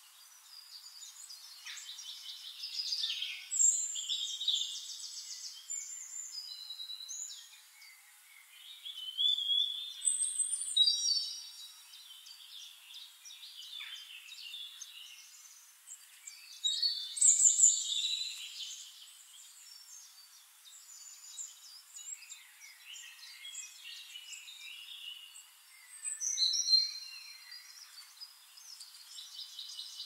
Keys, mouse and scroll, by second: 0.6 click, 2.3 click, 4.3 click, 5.9 ctrl+d, 7.4 shift+click, 8.7 click, 10.4 ctrl+shift+9, 12.6 ctrl+shift+9, 13.2 ctrl+shift+9, 14.9 ctrl+shift+0, 16.4 click, 16.8 click, 17.1 click, 17.3 middle click, 17.8 click, 19.8 click, 20.8 KP_2, 21.3 Return, 21.9 shift+-, 23.7 BackSpace, 25.0 click, 26.1 shift+-, 27.3 click, 27.5 middle click, 27.7 click, 27.9 click, 28.2-29.3 middle drag, 29.3 click.